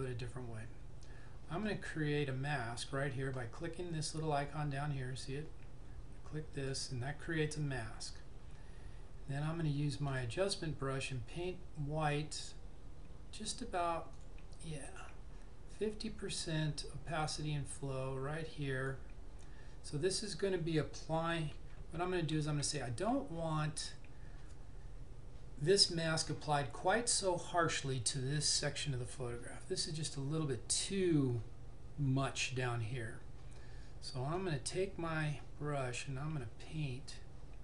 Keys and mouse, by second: 6.6 click, 10.1 click, 14.3 click, 21.7-22.6 typing, 34.5 click.